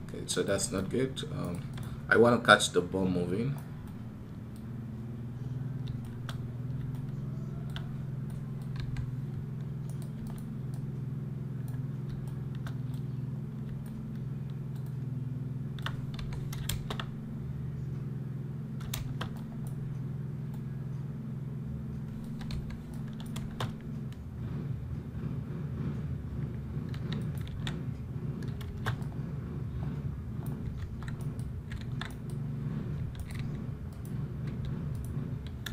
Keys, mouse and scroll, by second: 0.1 right click, 1.2 right click, 1.6 x, 9.7 right click, 10.2 x, 31.9 right click, 33.0 right click, 33.1 g.